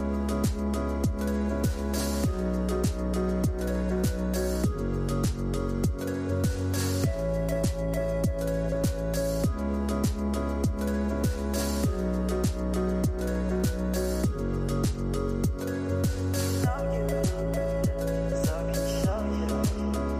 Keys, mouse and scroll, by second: 1.4-2.2 drag, 2.2-2.7 scroll down 4, 2.8-4.0 scroll up 1, 4.0 space, 7.6 scroll down 7, 8.9 scroll down 5, 9.0 space, 9.6 space, 18.9 space.